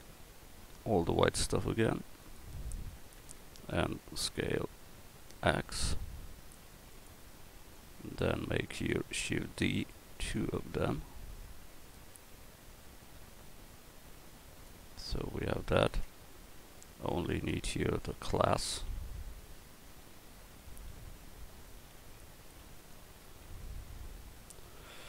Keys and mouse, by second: 0.2 l, 2.1-3.6 drag, 4.2 s, 8.9 click, 9.6 shift+d, 10.3-12.8 drag, 14.9 Tab, 16.0 Tab, 16.6 Tab, 17.5 Tab, 18.9 a, 21.9 l, 22.6 l, 23.2 l, 24.0 a.